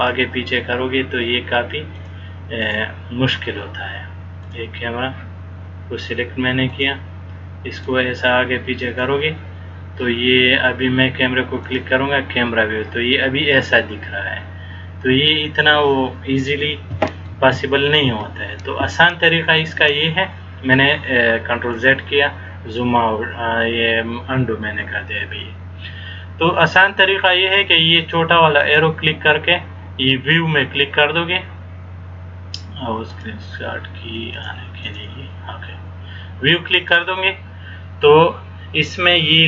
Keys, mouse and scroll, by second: 37.1 click.